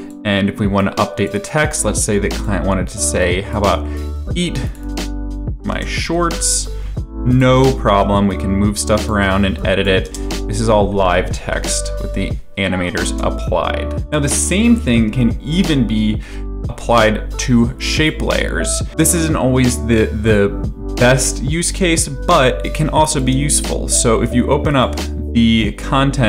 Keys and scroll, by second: 5.3-8.0 typing, 10.0 space, 13.1 space, 21.6 space.